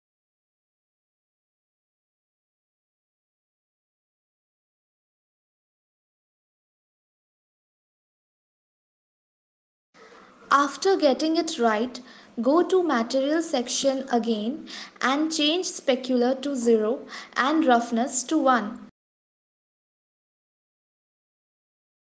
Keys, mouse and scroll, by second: 8.9 click, 10.7 Tab, 13.4 click, 14.4-15.5 scroll down 6, 15.8-16.2 scroll down 1, 16.9 click, 19.1 click.